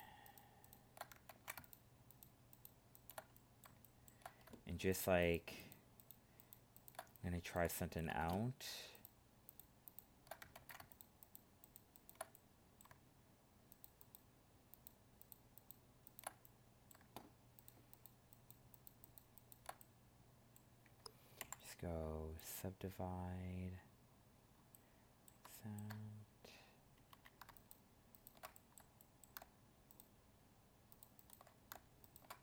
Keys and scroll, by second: 1.3 ctrl+z, 10.5 ctrl+z.